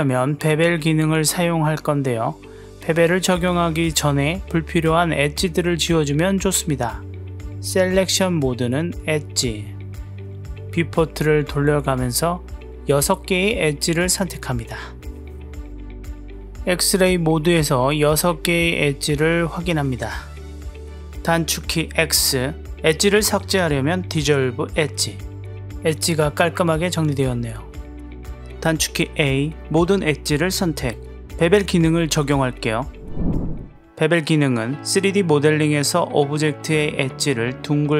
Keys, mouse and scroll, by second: 0.5 click, 1.9 click, 2.6 click, 4.1 click, 4.7-6.0 middle drag, 6.4 ctrl+z, 10.0 w, 10.4 click, 11.1 click, 12.3 click, 12.9 shift+click, 13.1 click, 13.6 shift+click, 13.8 click, 14.6-15.9 drag, 17.6 click, 18.2-19.5 drag, 20.3 click, 21.7 x, 25.0-26.3 drag, 26.5-28.6 drag, 28.8 a, 33.7 click, 33.8 a, 34.4 click, 35.6 click, 37.5 click.